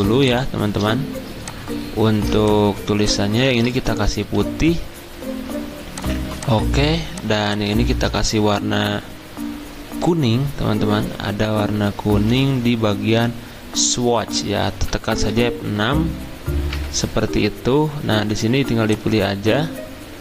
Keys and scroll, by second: 15.3 F6, 16.7 F6.